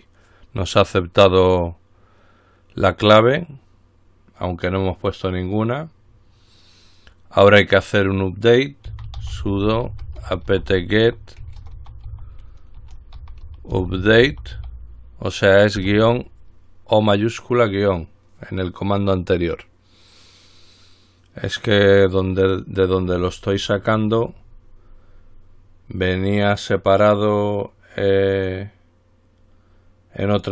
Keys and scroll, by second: 8.9-16.0 typing, 18.6 typing.